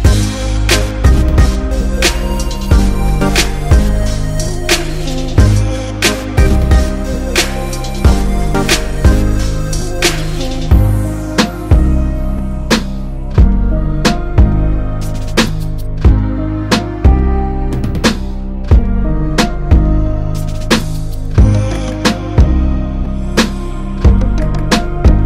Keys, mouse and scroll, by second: 6.7-8.0 drag, 15.9 click, 17.9 click.